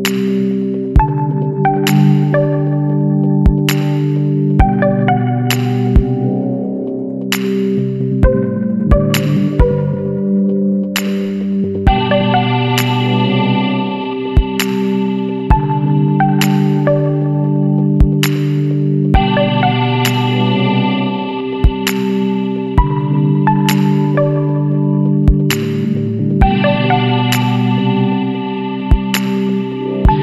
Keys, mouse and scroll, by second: 1.2 scroll up 1, 1.5 scroll down 1, 1.5 scroll up 1, 2.3 click, 3.9 click, 5.1 KP_2, 5.4 KP_9, 5.7 KP_Enter, 6.9-8.4 scroll up 4, 10.2 click, 13.0 click, 14.8 click, 16.1 click, 17.1 Escape, 17.7 click, 20.4 click, 22.1 KP_0, 22.3 KP_Decimal, 22.5 KP_5, 22.8 KP_Enter, 24.5-25.8 scroll down 6, 26.3 scroll up 2, 27.0 scroll down 1, 29.6 click.